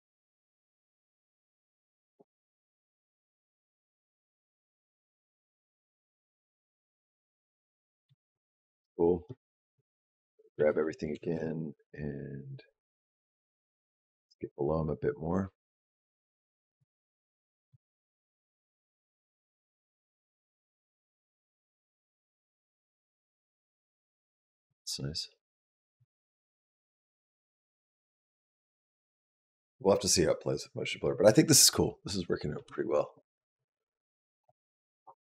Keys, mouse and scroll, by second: 7.9 space, 9.6 a, 10.4 a, 10.9 g, 17.3 click, 17.5 space, 32.4 space, 34.3 click, 35.0 click.